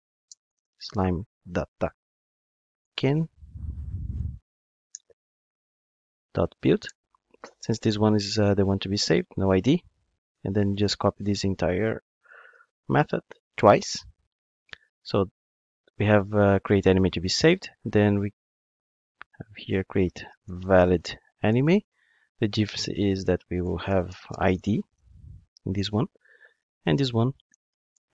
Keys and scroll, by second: 6.9 Return, 11.2 super+c, 12.5 super+v.